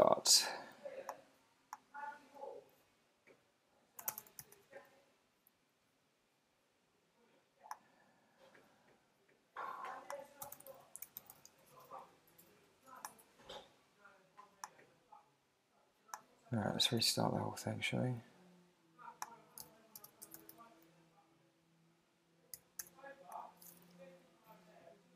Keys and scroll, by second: 4.1 super+space, 4.5 Return, 17.0 Return, 19.6 super+q, 20.0 super+space, 22.8 Return.